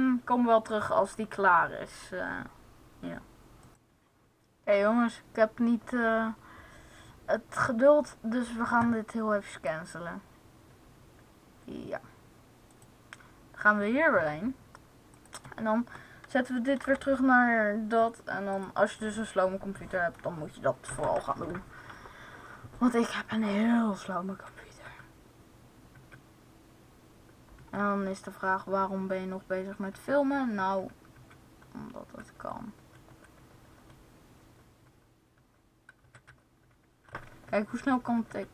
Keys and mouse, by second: 3.5 Left, 3.5 Right, 9.4-12.5 drag, 12.5-14.6 right drag, 15.0-16.8 drag, 18.4-20.5 drag, 24.1 Right, 24.6 Left, 25.9 Left, 28.2 Left, 29.1-30.8 Left, 31.1 Left, 31.5 Right, 32.0-32.7 Right, 32.9-33.9 Right, 34.3 Right, 34.7 Right, 35.4 Right, 35.9 Right, 36.1-38.5 Right.